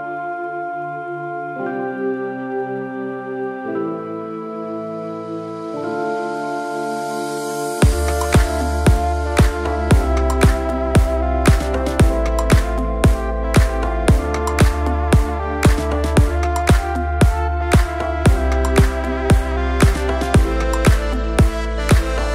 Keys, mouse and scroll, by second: 3.9 click, 4.5 click, 5.3-7.7 drag, 5.3 right click, 8.9 click, 13.3 Tab, 13.7 click, 16.3-16.7 scroll down 1, 16.9-17.9 shift+middle drag, 20.2 shift+a.